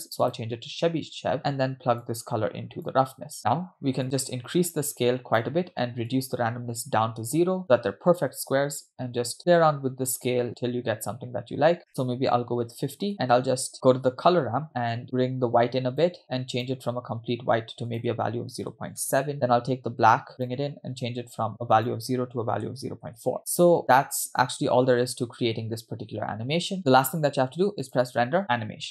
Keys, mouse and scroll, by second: 0.9-1.3 scroll down 1, 1.4 middle click, 2.0-3.1 drag, 3.4 scroll up 1, 4.0-5.6 drag, 6.1-7.6 drag, 8.4-11.9 shift+drag, 13.1 shift+click, 14.7-16.1 drag, 16.6 click, 20.0-20.5 drag, 20.9 click, 23.4 space, 23.8 space, 27.9-28.9 drag.